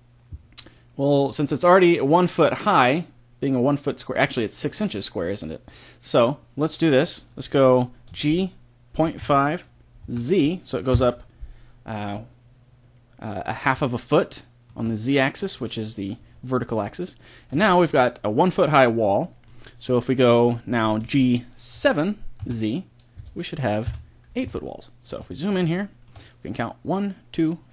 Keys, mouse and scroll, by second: 8.1 g, 14.0-18.9 middle drag, 20.9 g, 23.8 KP_1.